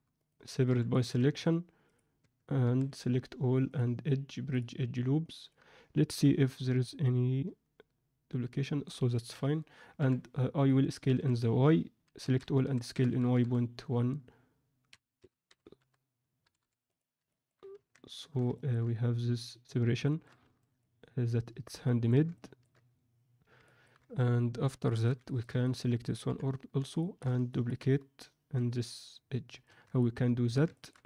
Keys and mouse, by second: 0.6 p, 1.1 Tab, 2.1 Tab, 2.6 a, 3.7-4.5 drag, 5.2 middle click, 6.7-8.8 alt+middle drag, 10.6 middle click, 11.1 a, 12.1 a, 12.5 s, 15.1 s, 17.3 ctrl+alt+middle click, 17.7 Tab, 18.1 alt+shift+middle click, 18.5 ctrl+alt+middle drag, 20.0 ctrl+middle click, 20.6 alt+a, 20.7-22.0 middle drag, 22.3-22.6 ctrl+middle drag, 23.6 ctrl+middle click, 24.9 alt+shift+middle click, 25.2 ctrl+alt+middle click, 25.6 click, 26.2 KP_3, 26.9 alt+shift+middle drag, 27.4 ctrl+middle click, 29.7 Tab, 29.9 alt+middle click, 30.7 ctrl+middle click.